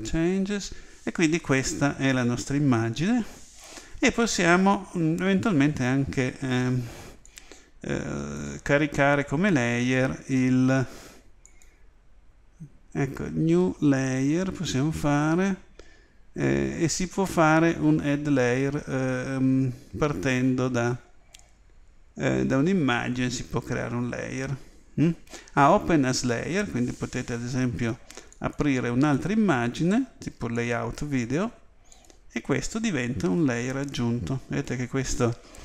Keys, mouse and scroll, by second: 1.8 typing, 31.0 typing.